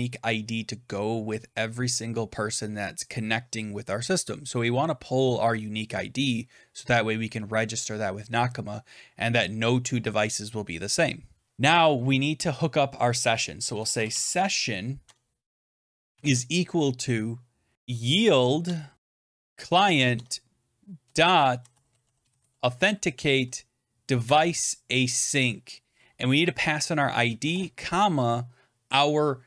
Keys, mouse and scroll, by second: 13.2-14.5 typing, 14.9 Tab, 15.8-22.8 typing, 18.5 Tab, 20.0 Tab, 23.0 Down, 23.2 Down, 24.1 Return, 26.7-27.8 typing.